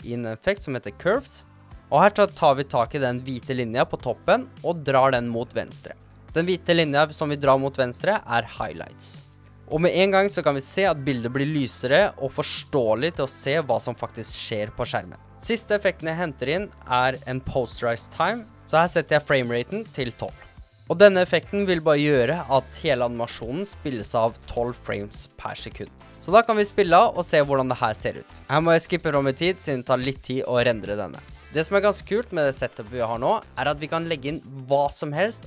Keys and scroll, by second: 0.7-1.8 typing, 17.7 typing, 20.0-20.7 typing, 21.2 Return, 26.0 space, 33.2 space.